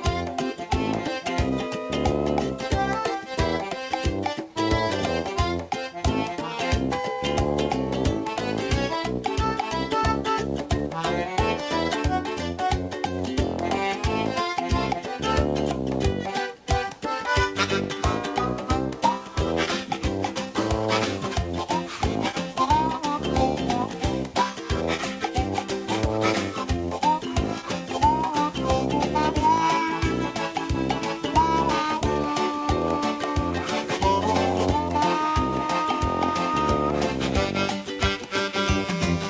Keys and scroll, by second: 6.1 KP_9, 6.3 KP_0, 6.4 Return.